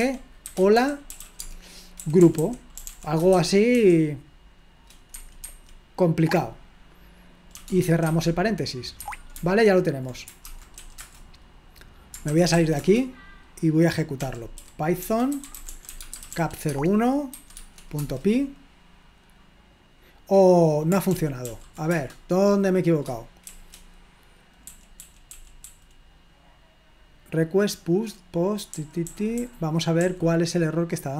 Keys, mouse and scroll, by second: 0.3-3.7 typing, 5.2 Escape, 5.5 Escape, 7.6-8.2 typing, 8.2 Escape, 9.8 Escape, 12.1-17.3 typing, 17.6 Tab, 18.0 Return, 21.1 ctrl+p, 21.4 ctrl+p, 21.9 Return, 24.7-25.6 typing, 29.2-30.4 typing.